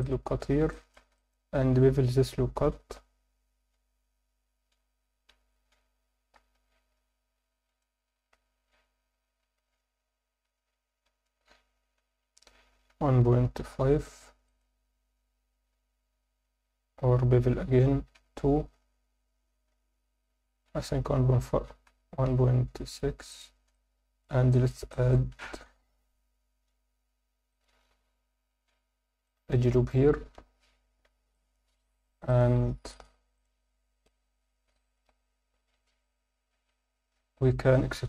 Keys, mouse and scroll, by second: 0.0 click, 0.4 scroll up 1, 0.7 alt+shift+middle click, 1.2 ctrl+alt+middle click, 2.2 ctrl+b, 4.1 scroll down 2, 5.4-7.6 scroll down 2, 16.4 ctrl+z, 21.5 ctrl+b, 22.8 ., 22.8 6, 23.3 click, 23.7 alt+middle click, 24.5 alt+shift+middle click, 24.9 ctrl+alt+middle click, 25.7 ctrl+r, 31.3 alt+middle click, 31.9 3, 32.3 click, 32.9 shift+click, 33.4 shift+click, 34.0 alt+middle click, 35.6 KP_7.